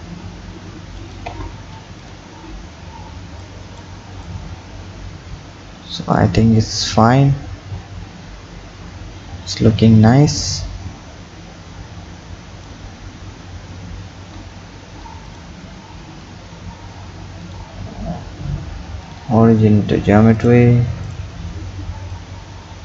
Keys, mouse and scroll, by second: 1.3 Tab, 2.0 click, 2.3 scroll down 4, 3.4 click, 13.0 Tab, 14.2 Tab, 15.3 click, 17.4-20.6 drag, 21.1 click, 22.2 click.